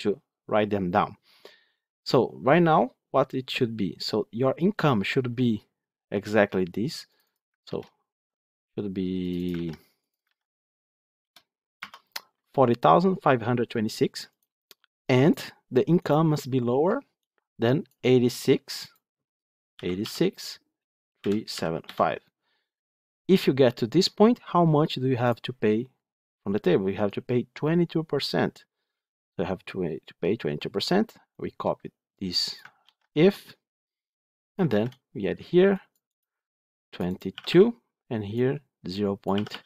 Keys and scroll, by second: 7.6 ctrl+c, 10.1 ctrl+v, 32.7 ctrl+c, 34.6 ctrl+v.